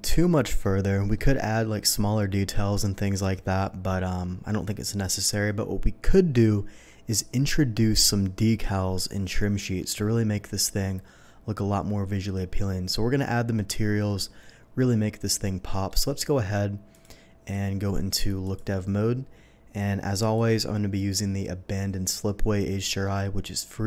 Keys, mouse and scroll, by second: 0.6-1.0 shift+middle drag, 15.6 middle drag, 16.9 click, 18.4 click, 20.1 click, 20.9 click.